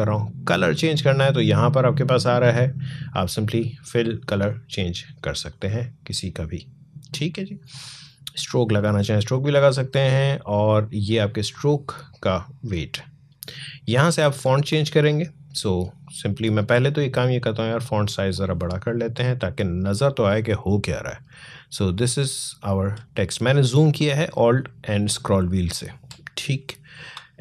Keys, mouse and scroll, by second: 2.2 click, 14.2 click, 18.1 click, 21.6 alt+scroll down 1, 21.7 alt+scroll up 1, 24.6-25.2 alt+scroll down 1, 26.5 space.